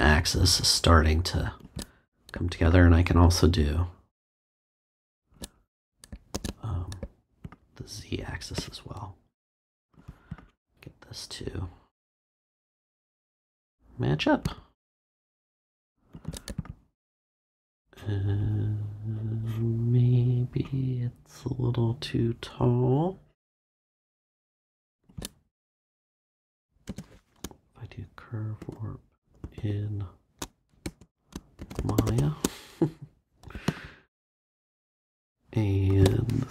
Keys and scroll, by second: 6.3 super+z, 26.8 space, 28.6 shift+i, 29.4 shift+n, 30.8-32.5 typing.